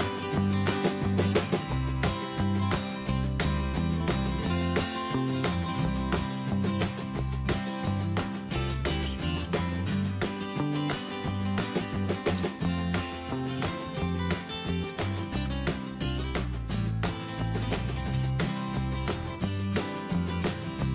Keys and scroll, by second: 0.8 ctrl+v, 7.8 Escape, 10.0 Down, 16.3 ctrl+z, 17.2 Escape.